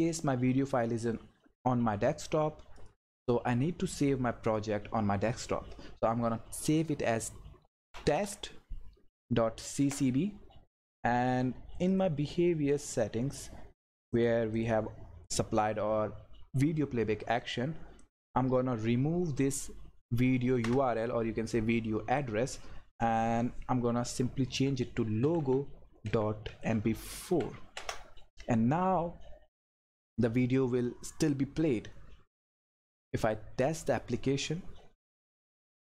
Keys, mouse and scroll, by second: 2.8 click, 7.4-8.7 typing, 9.8 Return, 11.9 click, 24.4-27.2 typing, 27.8 Return, 33.8 click.